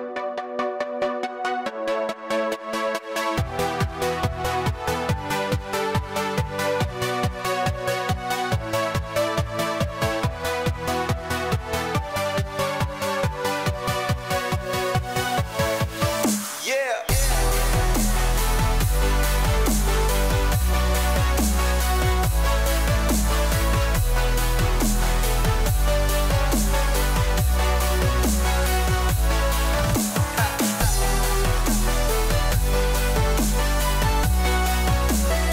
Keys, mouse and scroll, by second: 1.7 click, 3.4 click, 9.9 click, 15.7 click, 16.8 click, 17.9 click, 18.7 click, 20.4 KP_8, 20.7 KP_0, 23.3 click, 25.9 click, 28.7 click, 32.0 click, 32.7 click.